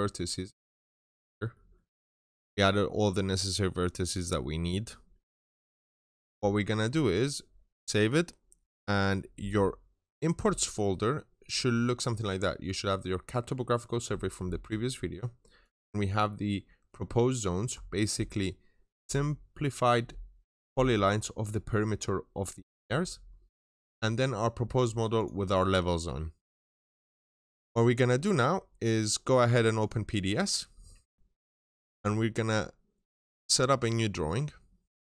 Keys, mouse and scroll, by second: 0.3 middle click, 0.9-1.4 scroll down 2, 0.9 middle click, 1.4 middle click, 3.3 scroll down 1, 4.7 middle click, 6.6 scroll down 1, 6.9 Escape, 9.3 click, 26.5 middle click, 27.2 Escape, 29.6 click.